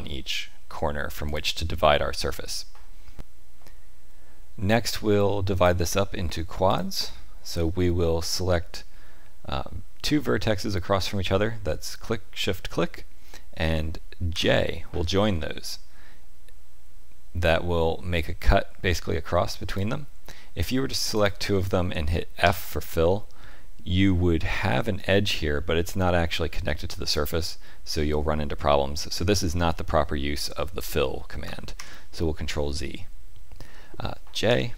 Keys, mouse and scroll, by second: 5.5 click, 6.6 shift+click, 14.3 j, 19.6 click, 21.1 shift+click, 22.4 f, 31.7 ctrl+z, 34.4 j.